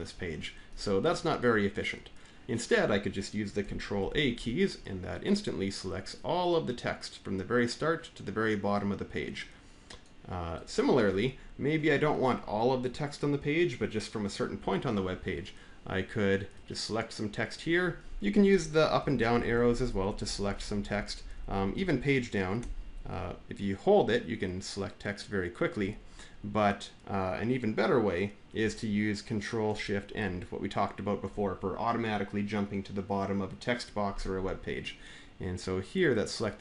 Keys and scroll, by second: 3.8 ctrl+a, 18.8 Down, 19.0 Down, 19.1 Down, 19.3 Down, 19.4 Down, 19.5 Down, 19.8 Down, 19.9 Down, 20.1 Down, 20.2 Down, 20.4 Down, 20.5 scroll down 11, 20.7 Down, 21.0 Up, 21.3 Up, 21.6 Down, 22.4 Page_Down, 22.9-25.6 scroll down 83, 29.9 ctrl+shift+End.